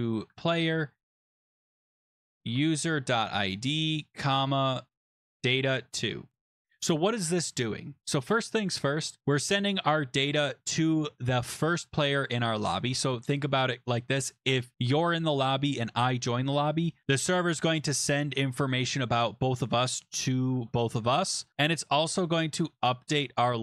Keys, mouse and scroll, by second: 0.0-0.8 typing, 2.1-3.7 typing, 5.0-6.2 typing, 6.6 click, 9.2 click, 10.4 click, 16.8 click.